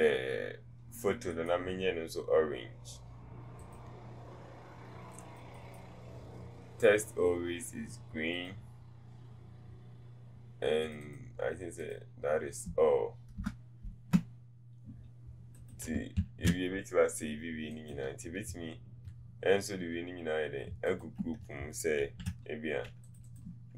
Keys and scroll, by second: 13.4 BackSpace.